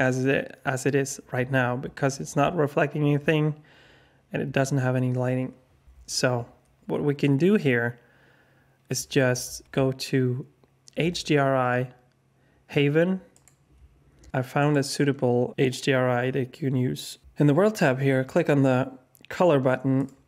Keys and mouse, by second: 19.9-20.2 drag.